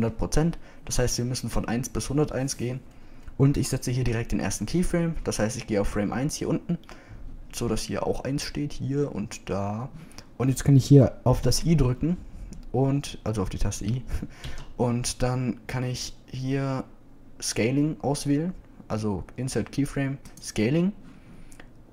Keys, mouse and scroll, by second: 12.5 i, 15.5 i.